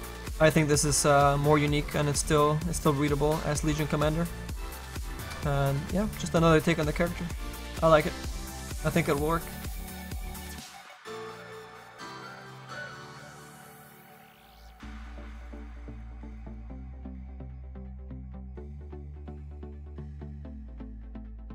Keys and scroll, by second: 16.9 s, 20.3 ctrl+z.